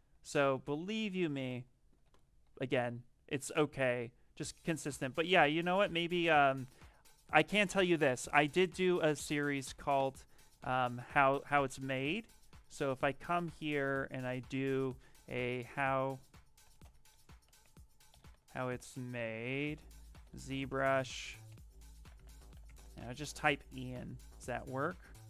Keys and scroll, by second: 0.1 ctrl+z, 0.3 ctrl+z, 0.5 ctrl+z, 0.7 ctrl+z, 0.9 ctrl+z, 2.1-2.8 typing, 6.4 q, 15.2-23.1 typing.